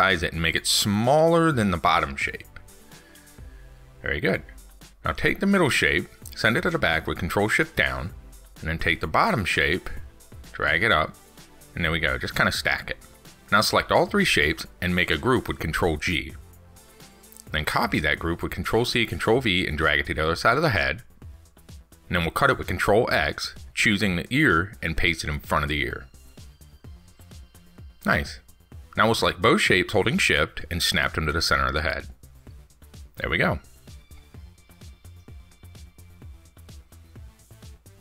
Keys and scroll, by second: 7.2 ctrl+shift+Down, 15.6 ctrl+g, 16.7 ctrl+c, 16.8 ctrl+v, 20.6 ctrl+x, 35.6 ctrl+s.